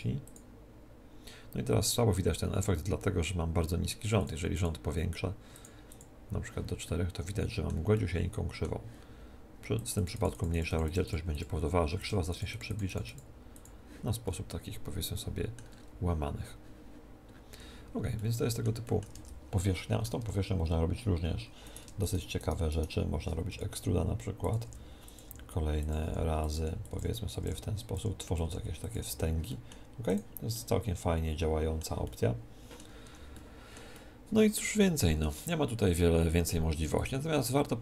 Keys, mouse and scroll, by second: 4.2-7.8 drag, 6.8 right click, 7.4-9.7 middle drag, 9.8-15.2 drag, 14.2-19.1 middle drag, 19.1 Tab, 20.2 Tab, 20.6 middle click, 21.6-24.4 right drag, 23.5 e, 24.4 middle click, 24.5-31.8 drag, 24.7-29.1 typing, 30.5 middle click, 31.8-37.6 middle drag, 33.0 Tab, 36.8 x.